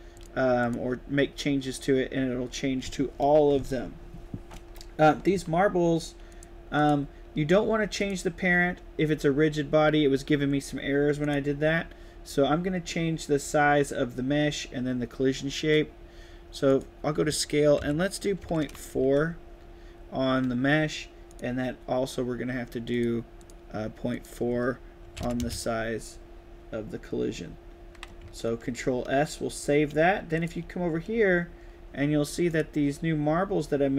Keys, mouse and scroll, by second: 0.0 click, 0.5 click, 6.2 click, 6.7 click, 11.2 click, 16.6 click, 18.8 Tab, 21.2 click, 22.8 click, 23.3 click, 24.0 click, 28.3 ctrl+s, 30.3 click, 32.4 click.